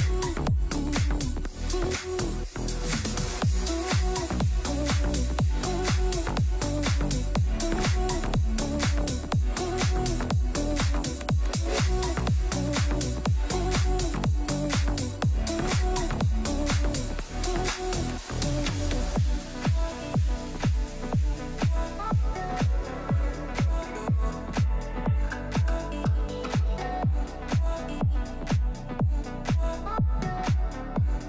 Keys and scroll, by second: 19.8 F3, 25.5 F2.